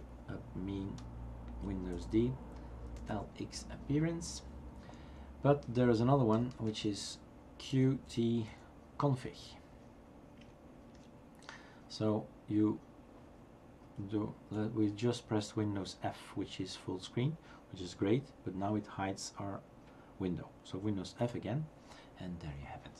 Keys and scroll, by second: 1.9 super+d, 2.7-3.6 typing, 6.3-8.9 typing, 10.9 Return, 21.2 super+f.